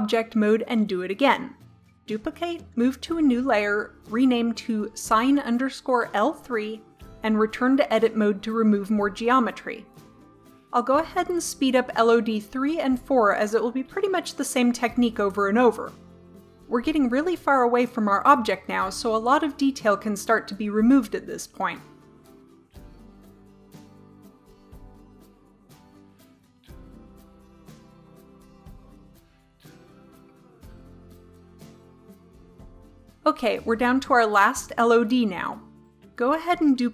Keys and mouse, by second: 2.1 shift+d, 3.8 m, 4.6 click, 6.2-7.7 drag, 8.9-10.3 drag, 9.3 Tab, 10.6-11.8 drag, 11.3 g, 11.8 middle click, 11.9 click, 11.9 g, 12.4 click, 12.4 g, 12.8 click, 12.9 Delete, 14.0 right click, 14.1-17.2 typing, 14.5 right click, 14.6 Delete, 15.4 right click, 15.8 Delete, 15.9 click, 16.3 click, 17.0 click, 17.3 Delete, 17.5 click, 18.1 click, 18.4 g, 18.7 click, 18.8 g, 19.2 click, 19.3 Delete, 20.5 right click, 20.6 Delete, 21.1 middle click, 22.3 Tab, 22.5 Tab, 22.7-23.7 middle drag, 23.7 right click, 23.9 Delete, 24.1 click, 24.2 Delete, 24.5 Delete, 24.9 click, 24.9 Delete, 25.3 Delete, 25.8 click, 25.9 g, 26.8 right click, 26.9 g, 27.3 click, 27.3 g, 28.2 right click, 28.3 Delete, 28.9 middle click, 29.1 middle click, 31.1 click, 31.9 Tab, 36.8 shift+d.